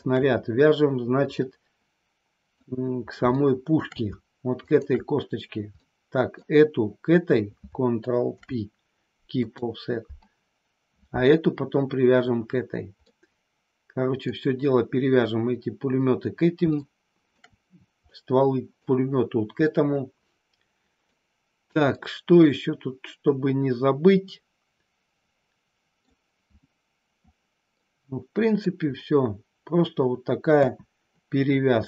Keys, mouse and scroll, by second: 1.4-2.5 middle drag, 3.4 shift+middle click, 4.6 shift+click, 5.8 middle click, 8.3 ctrl+p, 13.0-14.3 middle drag, 16.6 shift+middle click, 18.2 middle click, 19.6-21.0 middle drag, 21.9-26.2 middle drag, 27.8 middle click, 30.5 KP_1.